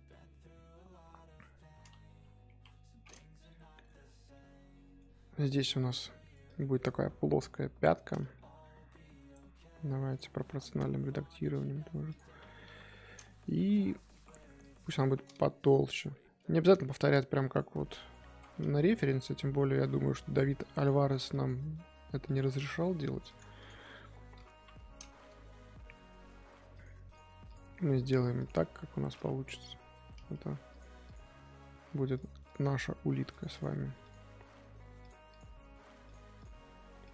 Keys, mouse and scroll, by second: 2.4 KP_3, 3.5-4.1 middle drag, 4.1 Tab, 4.3-5.4 middle drag, 5.4 3, 5.6 click, 6.4 click, 8.0 scroll down 1, 8.3 middle click, 8.8 s, 10.1 click, 12.6 KP_1, 13.8 1, 13.9 scroll up 2, 14.1 z, 14.6 click, 15.8 click, 17.3 click, 17.9 click, 21.3 click, 22.5 middle click, 23.2 click, 23.6 click, 24.5 KP_1, 25.4 g, 27.1 click, 27.4 click, 28.6 middle click, 29.5 KP_3, 30.7 click, 31.0 click, 32.4 click, 33.5 click, 34.0 click, 35.3 click, 36.4 click.